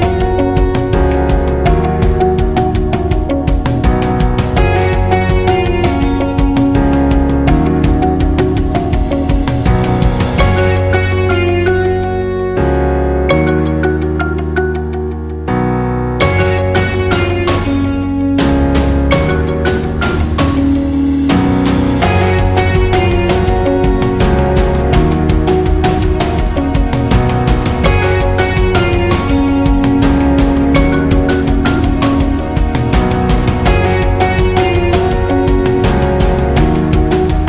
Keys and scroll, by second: 0.0 Left, 0.1 Left, 0.2 Left, 0.3 Left, 0.4 Left, 0.5 Left, 0.9 Left, 2.6 Down, 2.7 Down, 2.8 Down, 3.0 Down, 3.1 Down, 3.3 Down, 27.8 ctrl+z, 31.0 ctrl+z, 33.6 ctrl+z.